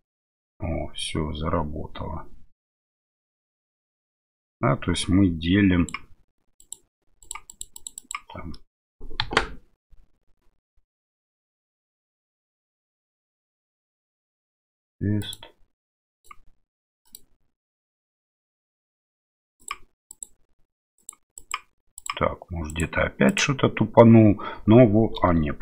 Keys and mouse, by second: 6.6 click, 7.2 click, 7.5 click, 7.8 click, 8.0 click, 8.5 middle click, 9.2 KP_1, 15.2-16.3 drag, 17.1-19.7 drag, 20.1-22.1 drag, 22.7 click, 23.3 click.